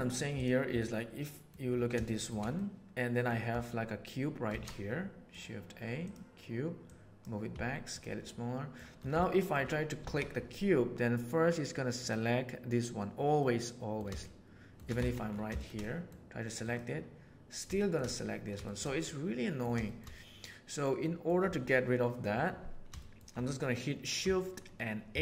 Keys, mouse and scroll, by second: 0.8-1.4 middle drag, 2.0 shift+middle drag, 2.5-3.2 middle drag, 4.4 shift+a, 6.8 click, 8.2-8.6 middle drag, 9.1-9.4 shift+middle drag, 10.0 alt+a, 11.9 click, 13.3-13.9 middle drag, 14.2-14.7 shift+drag, 14.9 alt+a, 15.5 shift+click, 15.8 click, 16.6 click, 17.7 middle drag, 18.6 shift+middle click, 19.0-19.5 middle drag, 19.8 shift+middle drag, 20.1-21.2 middle drag, 22.9 shift+middle click, 25.1 shift+h.